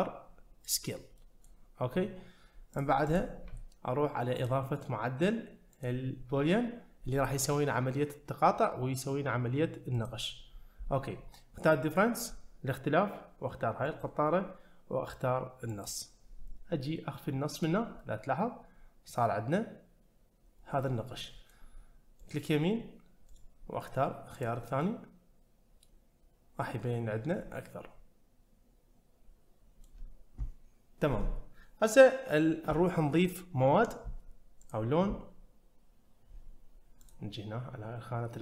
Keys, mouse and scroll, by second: 1.2 middle click, 2.7 click, 3.1 click, 4.4 click, 5.7-10.1 drag, 13.8 click, 17.6 click, 18.0-21.5 middle drag, 22.2-24.8 right drag, 24.8-29.8 middle drag, 34.6 click, 37.1 click.